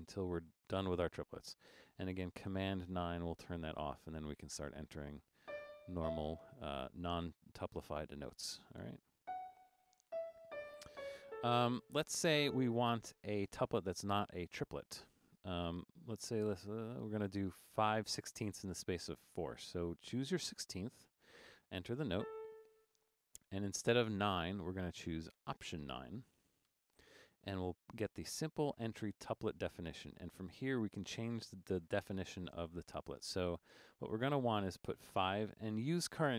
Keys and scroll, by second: 2.9 super+9, 5.3-6.5 typing, 9.2-12.3 typing, 20.5 3, 21.9-22.6 typing, 26.7 alt+9, 35.2 5.